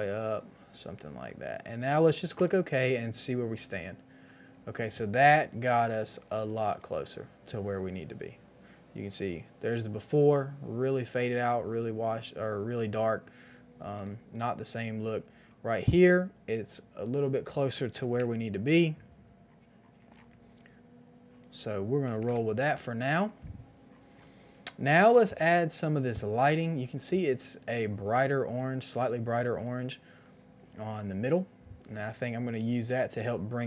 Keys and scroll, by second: 18.0 KP_1, 18.0 KP_0, 18.0 KP_0, 18.1 Return, 22.1 KP_5, 22.1 KP_0, 22.2 Return.